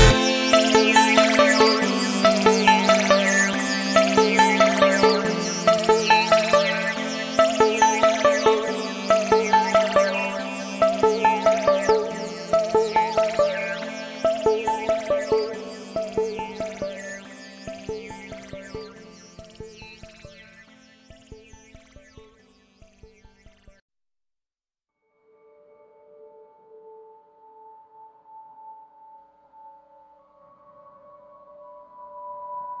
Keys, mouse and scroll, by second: 0.5 ctrl+scroll up 1, 1.1 ctrl+scroll up 1, 1.5-6.3 drag, 6.9 Delete, 8.4 click, 9.3 Up, 11.1 ctrl+scroll down 1, 11.6 click, 12.8 v, 13.0-19.6 drag, 19.6-28.2 drag, 28.2-32.8 drag.